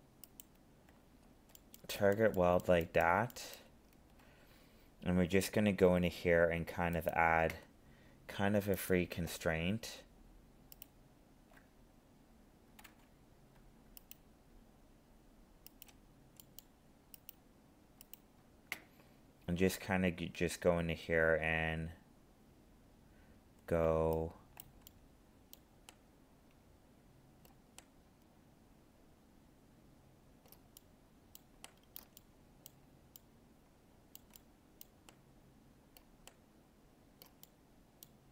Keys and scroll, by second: 12.9 ctrl+z.